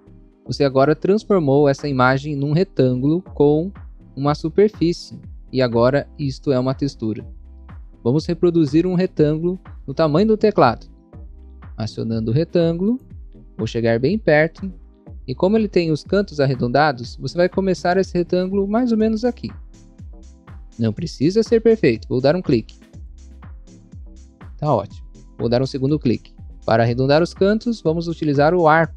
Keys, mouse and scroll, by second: 13.3 click, 13.4 scroll up 1, 14.0 scroll up 1, 16.2 scroll up 1, 16.8 scroll up 1, 22.8 click, 23.3 scroll down 1, 24.0 scroll up 1, 26.4 click, 26.4 scroll down 1, 27.0 scroll down 1, 27.6 scroll down 1.